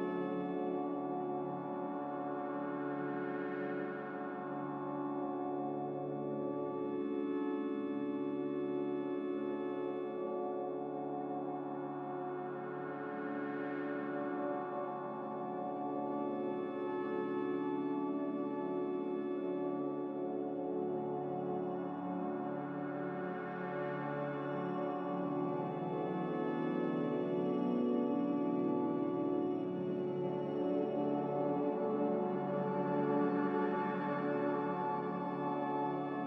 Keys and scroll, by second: 1.8 typing, 2.1 Return, 32.6 typing.